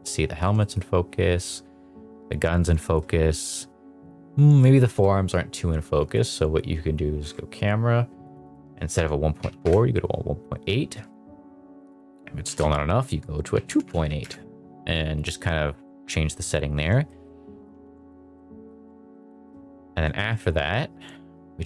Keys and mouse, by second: 0.5 shift+middle drag, 2.8 shift+middle drag, 4.7 shift+middle click, 6.1 click, 8.2-9.6 drag, 11.9-14.2 drag, 17.1 shift+middle drag, 17.8 ctrl+s, 18.5 shift+middle drag, 19.3 middle drag, 20.2 middle drag.